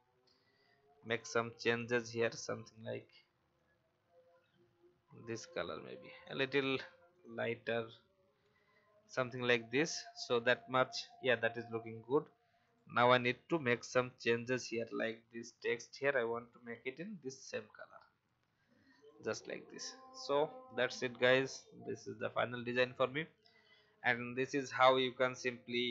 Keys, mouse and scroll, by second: 8.4 v, 9.1 click, 10.3-10.7 alt+scroll down 1, 11.7 alt+scroll up 1, 12.6 click, 14.0 shift+click, 15.4 shift+click, 17.8 click, 18.4 v, 21.1-22.1 typing, 21.2 click.